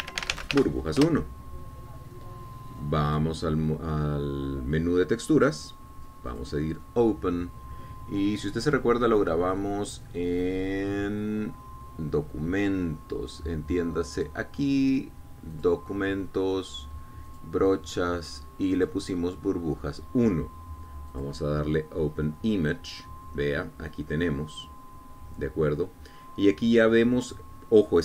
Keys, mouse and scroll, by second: 0.3-1.6 typing, 2.1 shift+Return, 4.2 click, 7.4 click, 11.1-11.5 scroll down 1, 15.3 click, 16.6 click, 18.4 click, 19.9 click, 22.2 click.